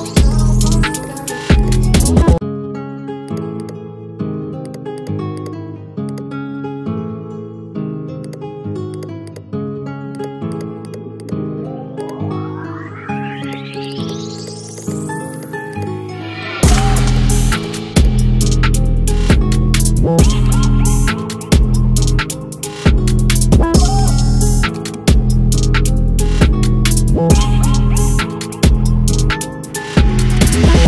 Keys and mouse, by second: 7.4 click, 16.1 click.